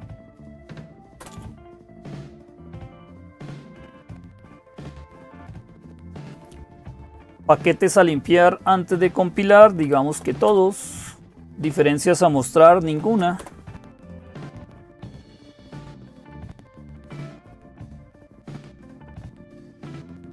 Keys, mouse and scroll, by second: 0.0-20.3 typing.